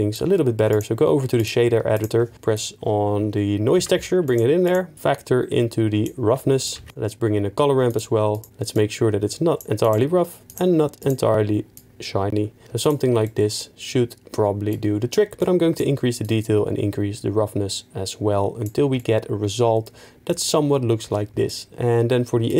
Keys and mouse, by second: 1.4-2.3 drag, 3.9 shift+1, 6.9 ctrl+q, 18.3 click.